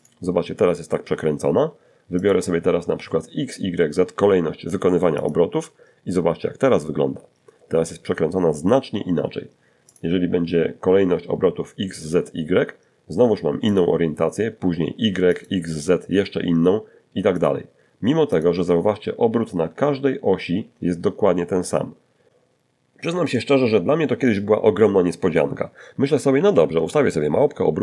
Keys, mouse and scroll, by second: 0.4 click, 3.4 click, 8.1 click, 10.2 click, 11.9 click, 13.5 click, 15.6 click, 16.5 click, 24.5 r, 24.7 r, 26.2 click, 26.9 r, 27.1 r, 27.7 click.